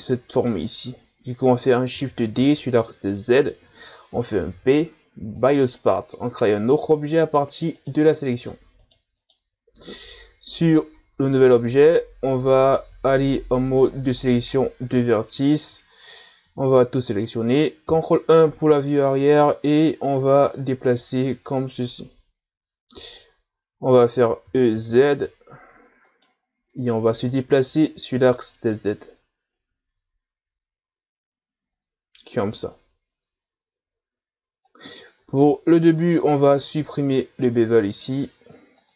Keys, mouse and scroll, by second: 1.9 shift+d, 4.5 p, 6.2 Tab, 7.2 right click, 7.8 right click, 8.3 right click, 8.8 right click, 9.2 right click, 10.8 Tab, 13.1 ctrl+Tab, 15.4 alt+right click, 16.0 a, 16.4 a, 17.8 ctrl+KP_1, 18.8-19.5 shift+scroll up 3, 19.5-20.5 scroll up 2, 20.5-23.4 drag, 24.5 e, 27.3-30.3 drag, 35.2 Tab, 36.0-37.1 scroll down 1, 38.8-38.9 drag.